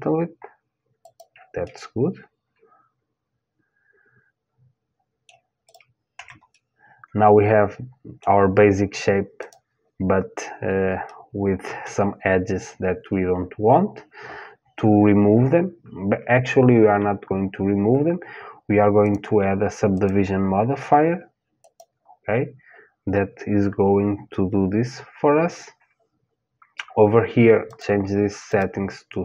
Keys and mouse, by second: 1.2-3.2 middle drag, 5.3-7.3 drag, 5.7 Tab, 7.3 middle click, 9.0-11.1 drag, 11.1-12.7 middle drag, 18.6-21.7 drag, 27.3-29.2 drag.